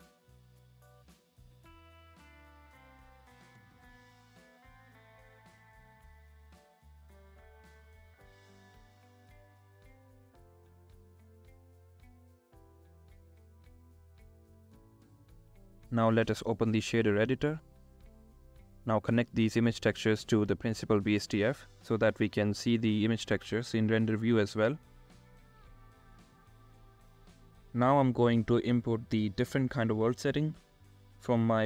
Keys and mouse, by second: 2.8 click, 3.0 ctrl+z, 4.1 ctrl+z, 7.7 ctrl+z, 13.4 ctrl+z, 14.8 click, 17.8 click, 21.6 click, 28.3 click, 30.3 click.